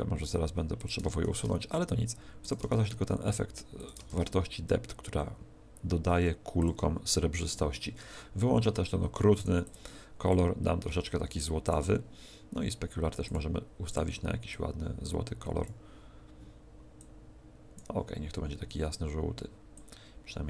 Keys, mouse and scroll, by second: 0.8 click, 2.4 click, 2.7 shift+d, 3.8 click, 4.0 shift+d, 6.6 click, 7.9-8.4 scroll up 1, 8.4 scroll down 3, 8.6-9.4 scroll down 5, 9.4 click, 9.4 scroll down 3, 13.2 click, 19.8 click.